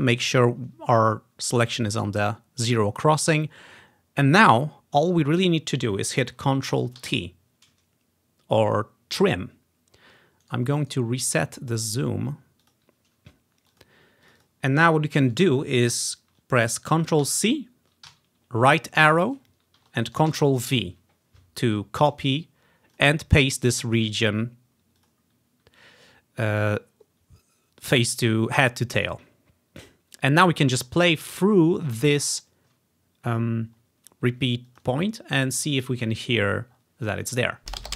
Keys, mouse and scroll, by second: 3.3-4.7 ctrl+scroll down 2, 7.1 ctrl+t, 10.5 right click, 10.9 right click, 12.7 click, 13.8 click, 14.3 click, 14.5-16.2 drag, 17.3 ctrl+c, 18.2 Right, 20.4 ctrl+v, 23.0-27.4 drag, 25.6-26.4 ctrl+scroll up 1, 26.4-26.7 ctrl+scroll up 1, 32.4-32.8 ctrl+scroll up 1, 33.5-33.9 ctrl+scroll down 1, 34.7-36.6 drag, 37.7 space.